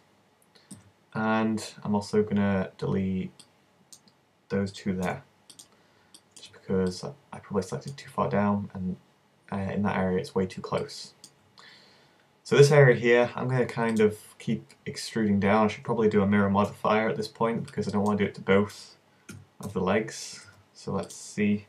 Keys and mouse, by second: 0.7 b, 5.0 x, 6.5 z, 14.0 right click, 16.6 KP_1, 19.4 a, 19.6 v, 20.4 b.